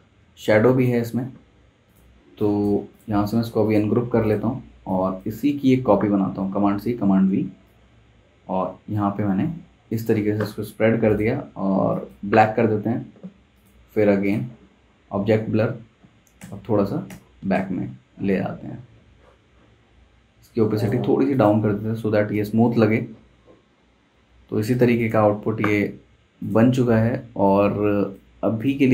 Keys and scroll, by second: 0.2 super+z, 2.1 space, 5.7 super+z, 6.5 super+c, 6.9 super+v, 16.4 super+[, 17.1 shift+super+[, 17.6 super+], 28.2 super+z.